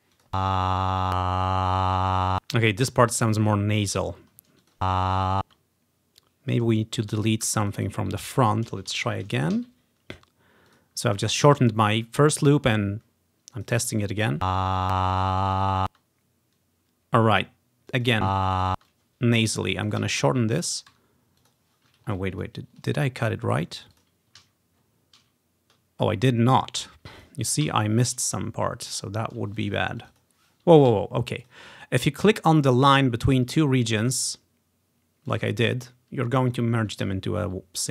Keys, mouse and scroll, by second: 0.2 click, 0.4 space, 2.5 space, 4.1-4.7 ctrl+scroll down 1, 4.7-6.2 drag, 4.9 space, 5.5 space, 6.6-7.7 drag, 7.5 Delete, 7.8 click, 8.0 click, 8.2 Delete, 8.5 click, 8.6-10.5 drag, 9.2 ctrl+c, 9.3 Right, 9.6 ctrl+v, 10.8-12.8 drag, 13.6 click, 14.5 space, 15.9 space, 18.0 click, 18.3 space, 18.8 space, 19.0-20.0 drag, 20.1 Delete, 20.1 click, 20.7 click, 21.0 Delete, 21.0 click, 21.6-23.0 drag, 22.2-23.4 ctrl+scroll up 1, 24.0-25.3 drag, 24.5 ctrl+z, 24.9-26.0 ctrl+scroll down 2, 25.3 ctrl+z, 26.9-29.0 drag, 27.7 Delete, 28.4-29.0 ctrl+scroll down 1, 29.1 ctrl+scroll up 1, 29.3 ctrl+scroll down 1, 29.6-31.0 drag, 31.0 ctrl+z, 31.5-33.0 drag, 33.7-35.4 ctrl+scroll up 1, 35.4-37.0 drag, 37.1 ctrl+z, 37.4-37.9 scroll down 1.